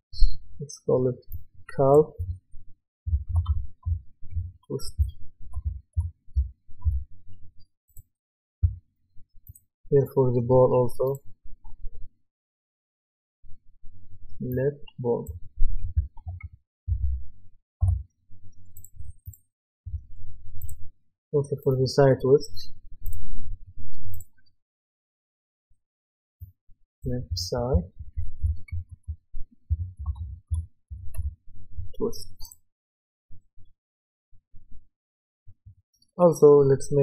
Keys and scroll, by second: 3.5-6.8 typing, 15.9-16.9 typing, 17.8 Return, 28.4-31.4 typing.